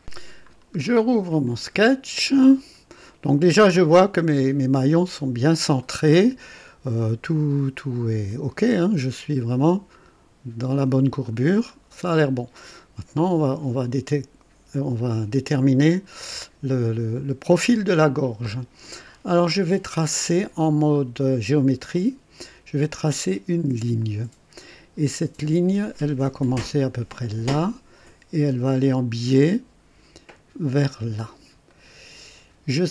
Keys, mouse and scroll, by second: 0.5-1.1 scroll down 1, 1.4 click, 2.2-2.6 scroll up 1, 2.9 right click, 7.5-9.0 right drag, 11.2-11.6 scroll down 1, 11.9-12.7 right drag, 13.4 scroll up 2, 21.9 click, 23.9 click, 27.4 click, 30.8 click, 31.7 right click.